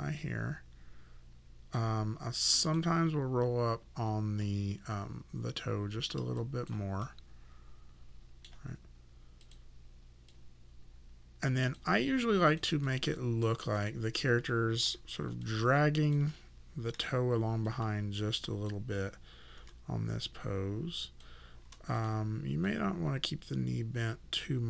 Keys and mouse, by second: 2.6 click, 6.4 click, 7.0 middle click, 9.4 click, 12.5 click, 12.8 alt+click, 14.9 w, 15.5 alt+click, 16.9 e, 17.7 click, 19.6 w, 20.2 click.